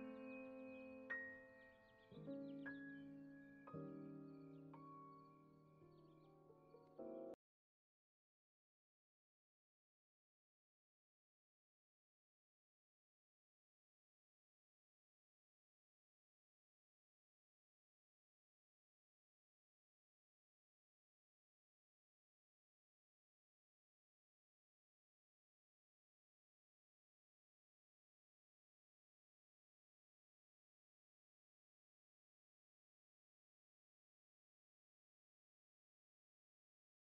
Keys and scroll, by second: 0.3 space, 3.6 space, 6.0 space, 9.1 alt+x, 9.7 x, 11.5 1, 11.7 0, 11.9 2, 12.4 Return, 12.9 x, 15.4 Escape, 16.4 space, 26.1 space, 26.7 ctrl+s, 29.1 Home, 30.3 space, 34.5 space.